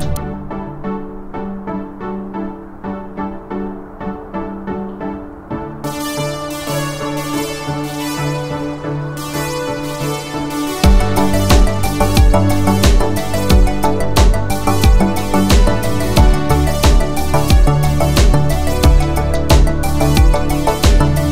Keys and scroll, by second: 1.9 Escape, 2.4-3.1 typing, 9.1 space, 9.7 space, 9.8 m.